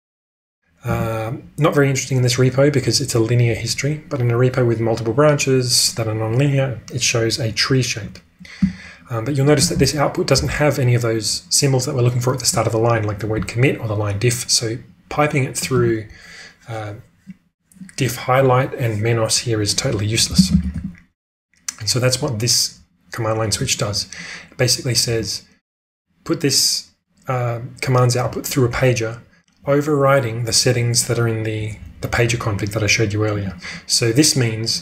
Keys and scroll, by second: 0.9 Return, 8.5 q, 20.0-21.1 typing, 23.4 h.